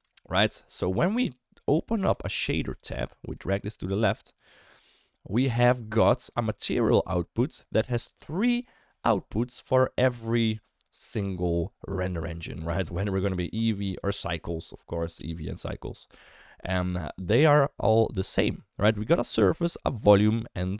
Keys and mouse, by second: 0.1 ctrl+z, 1.5 click, 3.2 click, 4.4 click, 6.6 middle click, 7.1 middle click, 12.7-14.1 drag.